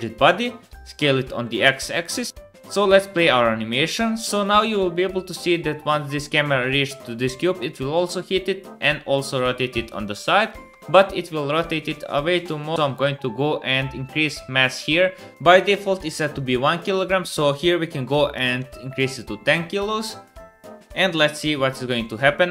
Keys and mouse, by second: 0.4 s, 1.6 click, 1.9 space, 2.3 space, 5.2 click, 5.8 middle click, 6.2 middle click, 6.7-8.0 middle drag, 10.7-12.7 middle drag, 10.7 space, 12.7-15.3 drag, 15.3-16.9 middle drag, 15.3 space, 16.9-19.4 drag, 19.4 space.